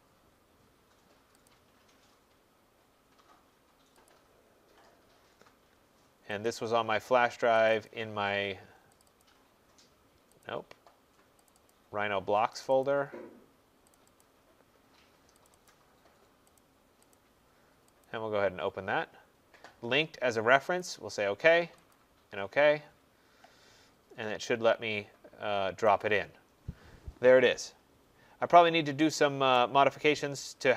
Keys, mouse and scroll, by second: 0.3 click, 1.5 click, 4.1 click, 6.5 click, 7.7 click, 7.9 click, 9.0 click, 9.3 click, 10.5 click, 11.7 click, 12.6 click, 12.9 click, 14.0 click, 14.2 click, 15.5 click, 15.7 click, 16.6 click, 17.2 click, 18.1 click, 20.8 click, 21.9 click, 28.4 middle click, 28.5 middle click, 29.6 right click, 29.9 middle click, 30.0 middle click, 30.0 middle click.